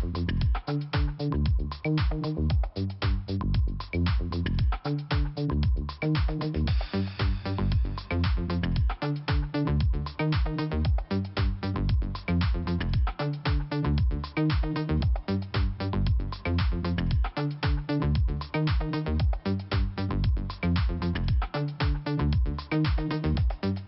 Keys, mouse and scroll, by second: 2.8 alt+f, 4.1 scroll down 1, 4.6 middle click, 5.4 click, 5.5 click, 6.6 scroll down 2, 7.5 middle click, 9.1 middle click, 9.3 middle click, 11.4 click, 13.3 scroll down 2, 14.0 middle click, 14.1 middle click.